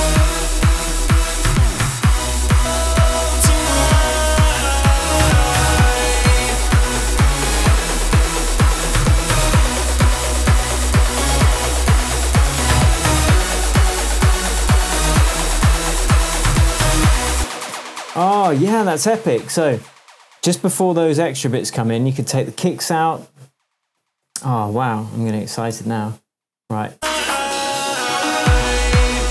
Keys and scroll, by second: 0.4 super+c, 2.3 super+v, 17.3 space, 17.9 super+space, 18.0 super+s, 24.2 BackSpace, 25.7 BackSpace.